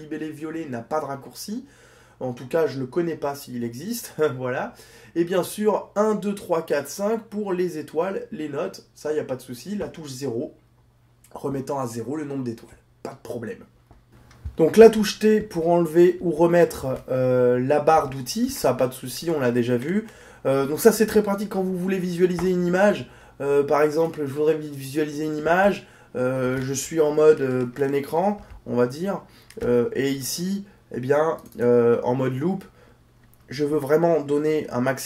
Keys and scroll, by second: 15.7 t.